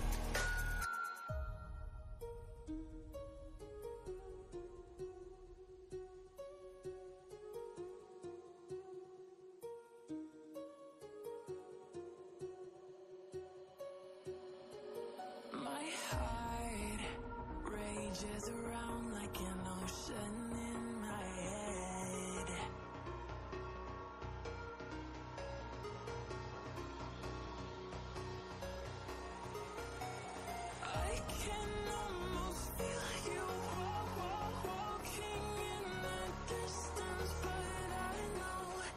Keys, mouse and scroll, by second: 2.5 click, 4.3-6.3 typing, 8.1 space, 8.4 ctrl+Return, 9.9 v, 10.2-11.5 drag, 14.9 click, 17.5-20.7 drag, 22.2 shift+Down, 24.1 shift+Up, 25.5 click, 26.4-27.4 alt+click, 29.5 ctrl+a, 29.6-30.7 typing, 30.8 ctrl+Return, 31.5-32.6 drag, 34.5 click, 35.9 click, 36.6 click.